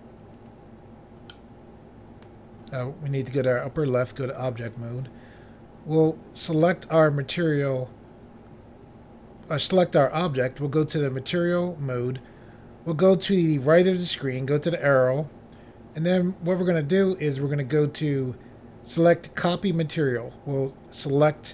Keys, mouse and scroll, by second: 0.3 click, 0.5 click, 1.3 middle click, 3.9 click, 4.0 click, 4.6 click, 4.8 click, 6.5 click, 6.6 click, 11.2 click, 11.3 click, 14.6 click, 14.8 click, 19.4 click, 19.6 click, 20.9 click, 21.0 click.